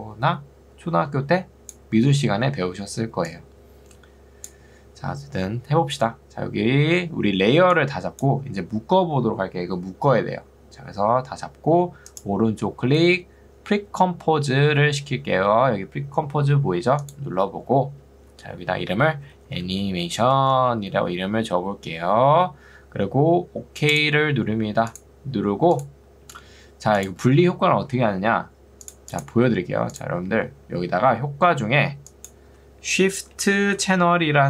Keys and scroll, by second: 18.3-20.6 typing, 32.7-34.4 typing.